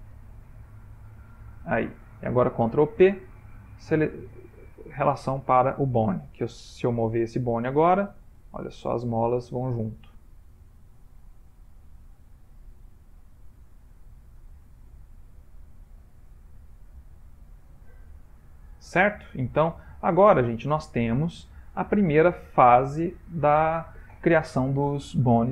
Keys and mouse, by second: 0.0 click, 2.7 ctrl+p, 6.0 middle click, 6.1 ctrl+middle click, 6.9 r, 11.1 z, 15.2 ctrl+middle click, 16.4 middle click, 16.6 middle click, 17.1 ctrl+middle click, 17.4 ctrl+middle click, 17.5 ctrl+middle click, 18.5 middle click, 20.7 middle click, 21.0 shift+middle click, 21.4 shift+middle click, 21.8 ctrl+middle click, 22.5 middle click, 23.5 middle click.